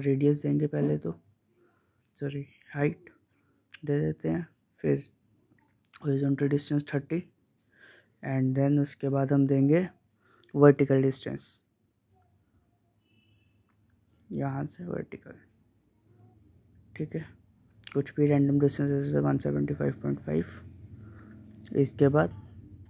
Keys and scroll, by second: 5.5-6.3 typing, 18.1-20.0 typing.